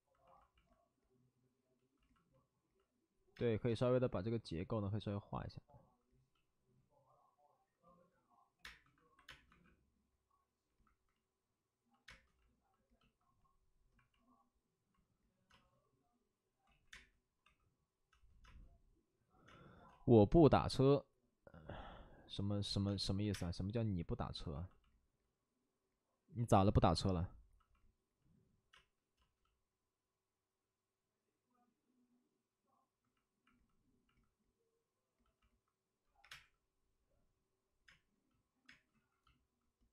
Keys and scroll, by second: 1.2 space, 1.3 space, 3.3 space, 3.6 space, 8.5-9.4 typing, 12.0 space, 15.4 space, 16.6 ctrl+z, 16.8 space, 17.4 2, 18.0 space, 23.1 space, 23.1 3, 28.7 space, 34.7 space, 36.2 3, 36.2 space, 37.8 space, 38.6 space, 38.9 ctrl+z.